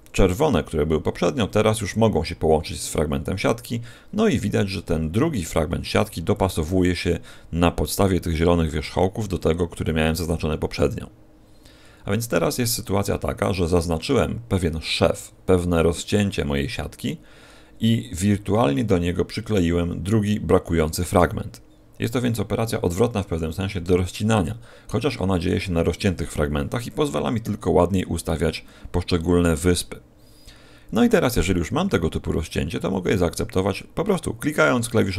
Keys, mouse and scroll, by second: 12.1-13.0 scroll down 2, 13.0 middle click.